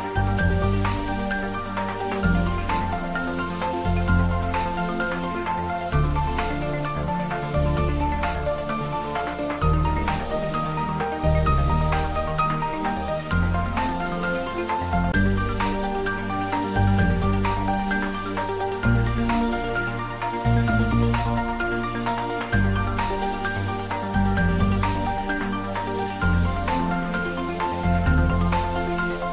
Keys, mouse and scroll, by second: 0.2-2.1 drag, 2.8-4.1 scroll down 1, 4.1-5.9 scroll up 1, 5.9 Tab, 8.5 click, 14.7-15.5 scroll down 1, 15.5 click, 17.3-18.4 scroll down 1, 18.4 Tab, 19.2-19.6 scroll down 1, 19.6 middle click, 19.7-22.2 middle drag, 22.4 scroll up 1, 25.4 Tab, 26.3 click.